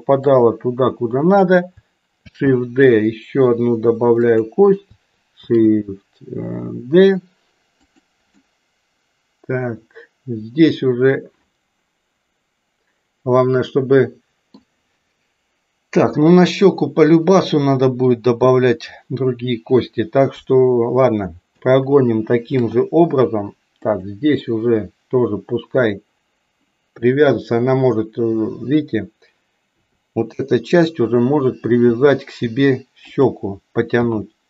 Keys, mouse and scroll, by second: 2.2 shift+d, 8.3-14.7 middle drag, 20.3 KP_3, 22.5 shift+d, 25.9-27.3 middle drag, 29.7 KP_7, 31.8 r, 33.9 g.